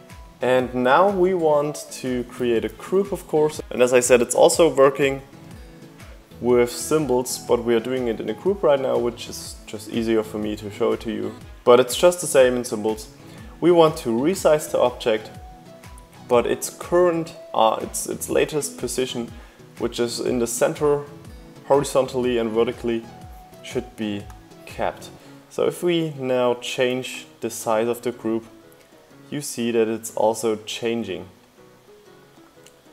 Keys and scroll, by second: 1.3 super+g.